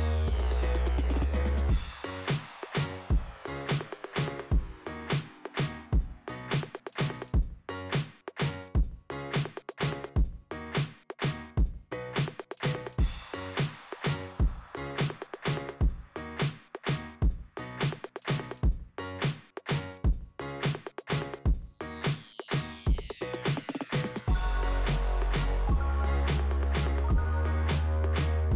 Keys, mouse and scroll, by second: 0.2 scroll down 2, 1.9 scroll up 1, 4.8 scroll down 2, 7.0-7.5 scroll up 2, 12.0 click, 12.1 click, 13.8 click, 18.7-19.2 scroll down 1, 19.3 scroll down 1, 21.0 middle click, 22.0 scroll up 2, 23.5 click, 27.1 click.